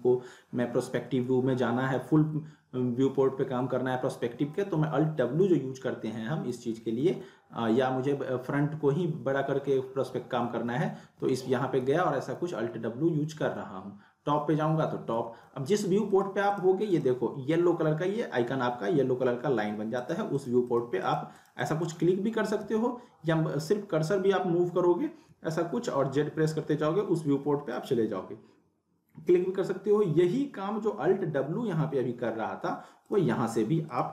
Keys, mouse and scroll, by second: 1.6 alt+w, 4.1 alt+w, 9.0 alt+w, 14.6 w, 15.2 alt+w, 16.1 click, 20.0 click, 22.6-26.7 typing, 27.7 click, 30.9 alt+Num_Lock, 30.9 click, 31.1 alt+w, 31.6 alt+w, 33.1 click.